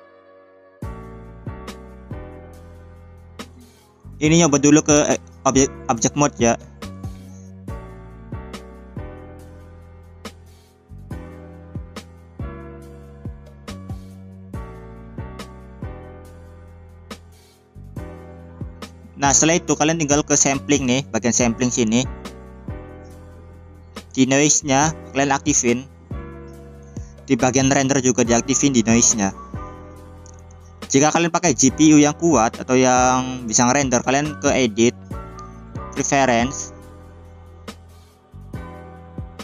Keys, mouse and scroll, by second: 4.0-4.5 scroll up 3, 4.5-13.5 drag, 19.1 click, 20.6 click, 21.0 click, 21.5 click, 22.6-23.3 scroll down 1, 23.8-24.6 scroll down 1, 25.0 click, 25.9 scroll down 2, 28.1 drag, 33.7 click, 39.3 click.